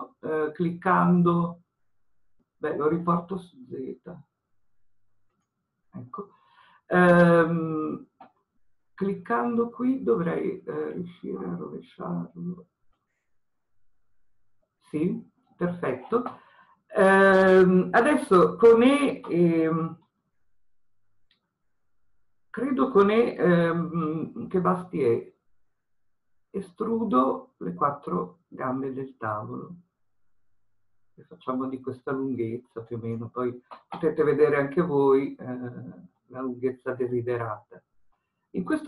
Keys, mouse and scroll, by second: 5.5 click, 13.1 click, 22.2 e, 36.2-38.8 middle drag, 37.5-38.1 scroll down 1.